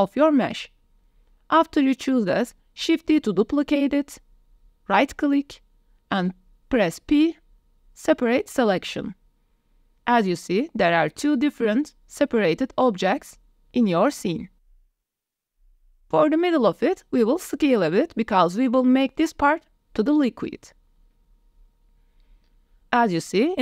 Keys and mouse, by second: 0.0 shift+click, 0.4 click, 1.2 shift+middle click, 2.3 shift+d, 7.0 p, 9.4 Tab, 11.4 g, 13.2 g, 14.7-15.2 drag, 16.1 click, 16.7 s, 18.8-19.7 middle drag, 21.0-22.2 middle drag, 23.4-23.6 middle drag.